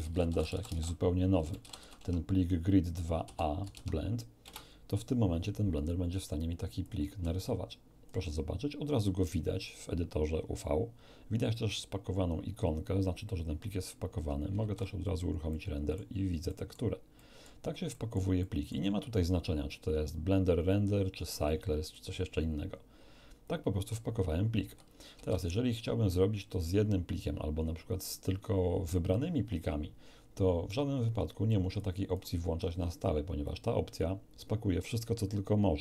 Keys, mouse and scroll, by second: 0.0-1.8 typing, 2.0 Tab, 3.2 a, 3.6 ., 3.7 Tab, 4.4 Return, 6.8 click, 7.4 alt+click, 14.6 shift+z, 15.5-16.1 shift+middle drag, 16.4 middle click, 17.2 middle click, 17.9-18.8 middle drag, 21.4 click, 25.1 ctrl+q, 25.4 ctrl+click, 28.0 click, 31.2 click, 31.8 click, 32.6 click, 33.4 click.